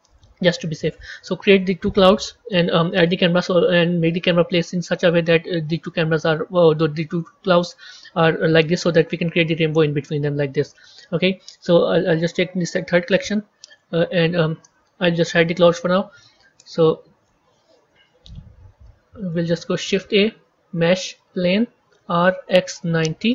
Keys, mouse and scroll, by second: 0.1-1.3 right drag, 1.3 KP_1, 3.0 KP_0, 12.0 click, 12.9-15.6 middle drag, 15.6 click, 16.7 shift+middle click, 17.7 KP_1, 18.8-21.2 shift+middle drag, 21.2 shift+a, 22.0 r.